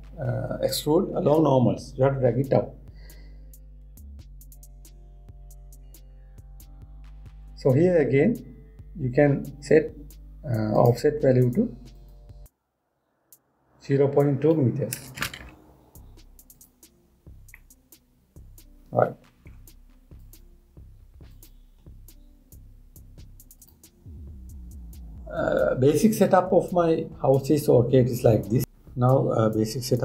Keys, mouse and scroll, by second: 11.4 click, 12.5-15.7 drag, 18.2-20.8 middle drag, 20.8 click, 22.0 click, 24.2 click, 27.2-27.9 scroll up 5, 27.9 scroll down 1, 28.0 scroll up 1, 28.1 scroll down 1, 28.5 scroll up 1, 28.6-30.0 middle drag.